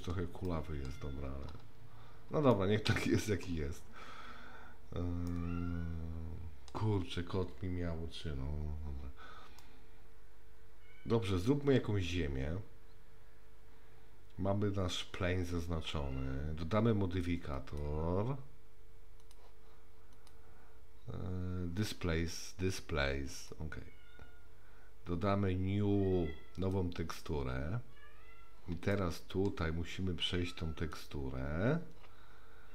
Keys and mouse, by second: 0.5-0.9 middle drag, 2.5-3.5 middle drag, 5.3-6.7 middle drag, 9.6-11.8 middle drag, 17.7 click, 19.2 click, 20.1-23.5 drag, 26.6 click, 28.9-29.5 shift+middle drag, 30.8 click.